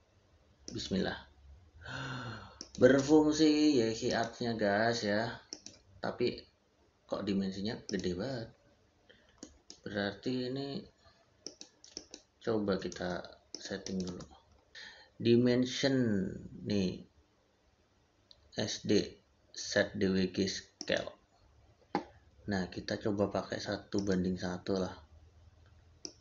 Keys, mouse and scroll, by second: 0.5 click, 4.0 click, 7.7 click, 9.2 middle click, 9.6 Escape, 11.3 click, 12.6 e, 12.7 space, 13.4 click, 13.9 space, 20.6 click.